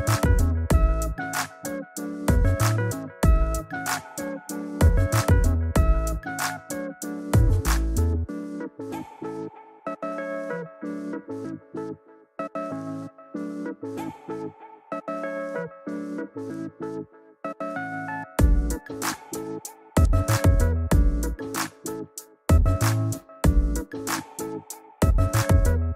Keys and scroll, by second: 8.7 Return.